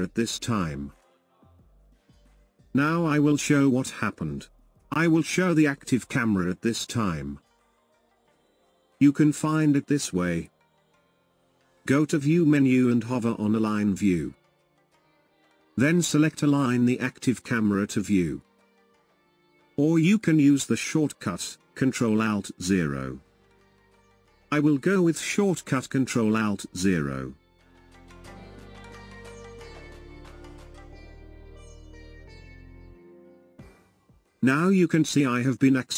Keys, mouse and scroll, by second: 0.6-2.4 middle drag, 2.4-2.8 scroll down 2, 2.8-5.9 middle drag, 9.9-13.3 shift+middle drag, 13.3-27.7 drag, 27.7 alt+KP_0, 29.4-32.5 middle drag, 33.7-35.9 shift+middle drag.